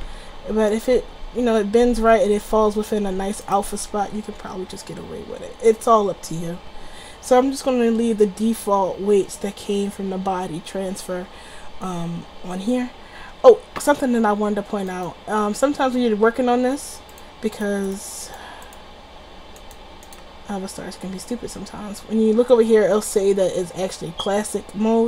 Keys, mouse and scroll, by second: 0.1 alt+r, 1.0-2.6 drag, 1.3 r, 3.9 a, 4.1 a, 4.4 alt+r, 7.2 click, 7.5 click, 16.4 click, 16.9 middle click, 17.2 click, 18.9-19.5 drag, 19.7-21.8 drag.